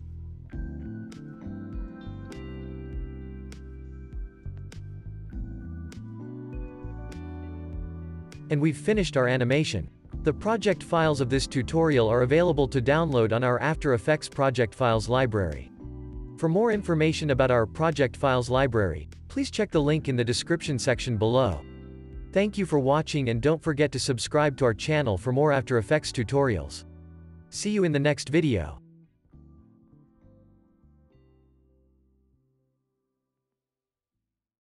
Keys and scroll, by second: 2.1 space, 13.5 space, 14.1 ctrl+s, 15.5 -.